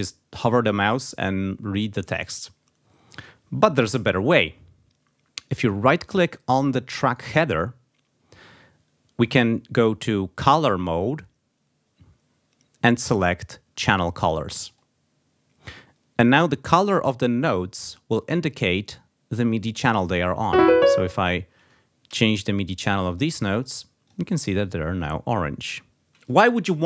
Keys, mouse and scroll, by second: 2.9 click, 6.9 right click, 14.5 click, 16.6 click, 20.3 click, 21.9 c, 22.9 click.